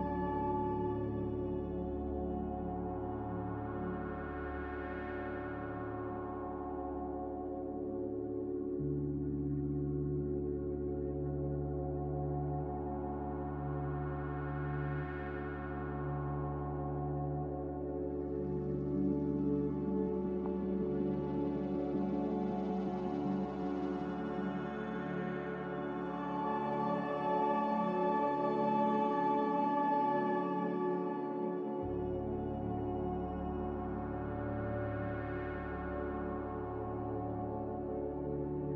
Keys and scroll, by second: 14.1 x, 16.1 3, 16.8 Return, 22.9 Return, 23.1 z, 31.8-32.5 typing, 35.2 Return.